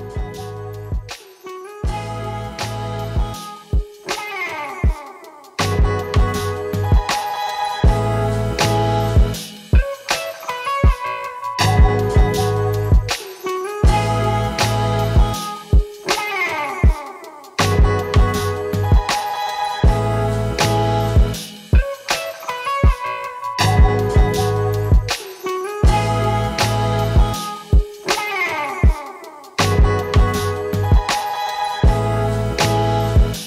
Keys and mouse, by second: 0.0 KP_0, 1.8 middle click, 2.7 middle click, 5.3 click, 5.5 shift+click, 6.0-6.6 middle drag, 7.0 shift+click, 7.2-7.7 shift+middle drag, 7.8 shift+middle click, 8.8 ctrl+l, 9.3 alt+a, 9.9-10.3 shift+middle drag, 10.3 shift+click, 10.4 middle click, 10.5 shift+click, 10.6 middle drag, 10.9 shift+click, 11.0 middle drag, 11.2 shift+click, 11.3 middle click, 11.4 alt+click, 11.8 middle click, 11.9 shift+drag, 12.0-12.6 middle drag, 13.1 alt+a, 14.2-14.7 shift+middle drag, 17.5-19.1 drag, 21.3-22.1 drag, 22.5-23.6 drag, 23.6 shift+middle click, 23.8 click, 24.3 shift+middle click, 24.8 shift+middle click, 25.5-26.1 shift+middle drag, 26.1 drag, 26.4 middle click, 26.5 click, 26.6-27.7 middle drag, 27.7 click, 27.9 shift+drag, 28.2 shift+click, 28.6 shift+drag, 28.7 alt+middle click, 29.1 middle drag, 29.3 click, 30.1-30.7 shift+middle drag, 30.7-33.4 drag, 31.6 Left, 31.8 Left.